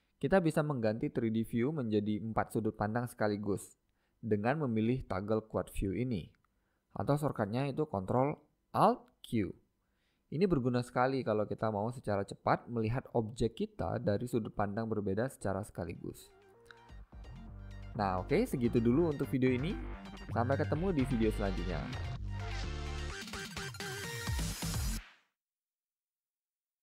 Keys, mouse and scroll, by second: 0.8-9.3 middle drag, 2.0-12.8 drag, 12.8-13.4 middle drag, 13.4-14.9 scroll down 2, 14.9 scroll down 1, 15.2-17.0 drag, 15.2-16.5 middle drag, 16.8-18.7 middle drag, 18.7-21.2 drag, 19.9 middle click, 21.2 middle click, 22.5 middle click, 23.1-23.4 scroll up 4, 23.2 middle click, 23.4-24.7 middle drag.